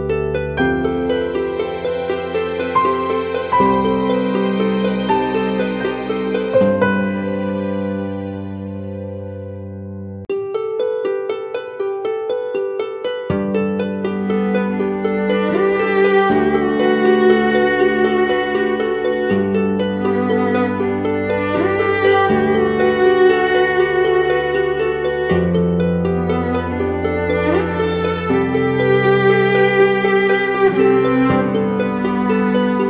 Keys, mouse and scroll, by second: 9.1 double click, 17.1 shift+click, 19.4 shift+click, 22.1 double click, 25.2 double click, 29.1 shift+click.